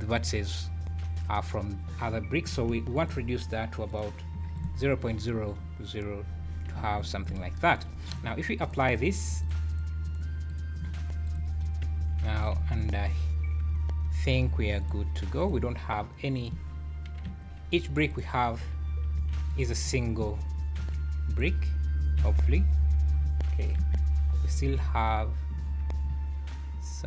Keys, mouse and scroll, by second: 3.0 click, 5.3-5.9 scroll down 11, 6.2 z, 6.8 `, 7.3 alt+a, 7.9 scroll down 2, 8.6 click, 8.9 click, 9.7 click, 10.1 click, 10.5 click, 11.3 click, 11.6-12.0 scroll down 4, 12.2 Tab, 12.5 a, 13.7-14.3 scroll up 7, 14.6 3, 14.8 click, 15.4 click, 16.3 click, 17.2 l, 17.7 scroll down 4, 18.1 click, 19.2 l, 19.5 click, 20.8 l, 21.3 click, 22.2 l, 22.9 scroll up 4, 23.8 KP_Decimal, 24.1 scroll up 3, 25.8 scroll up 2.